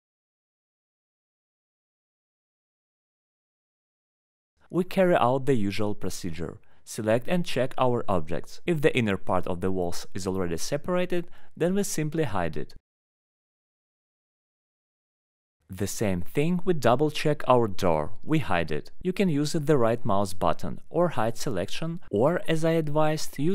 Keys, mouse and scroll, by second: 1.2 click, 2.6-2.9 scroll, 3.1 middle click, 3.7 click, 5.7 alt+middle click, 7.2 middle click, 8.2 ctrl+click, 8.7 click, 9.7 click, 10.3 alt+middle click, 10.5 middle click, 10.5 middle click, 11.6 click, 12.1 alt+middle click, 12.4 right click, 13.3 click, 13.8 alt+middle click, 14.3 click, 14.8 scroll up 1, 16.1 click, 16.8 right click, 17.7 click, 18.0 middle click, 18.1 middle click, 18.7 alt+middle click, 19.1 middle click, 19.4 click, 20.0-20.4 scroll, 21.3 scroll down 2, 21.9 alt+middle click, 23.4 click.